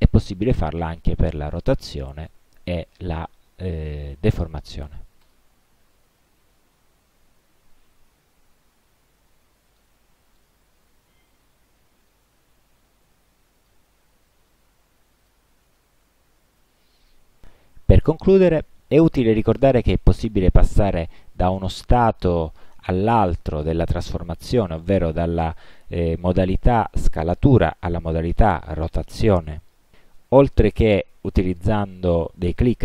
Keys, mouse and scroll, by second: 2.2 click, 5.3 click, 8.1 click, 9.9 click, 13.7 click, 15.3 click, 21.9 click, 23.2 click, 24.2 click, 25.4 click, 27.7 click, 30.2 click, 31.0 click.